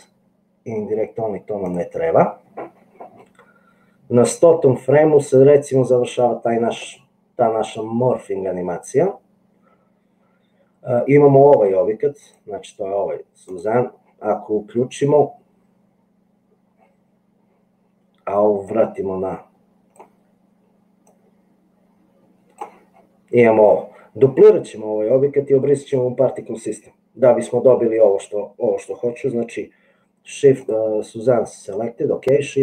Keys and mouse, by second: 13.6 click, 18.8-20.2 drag, 21.4-22.7 drag.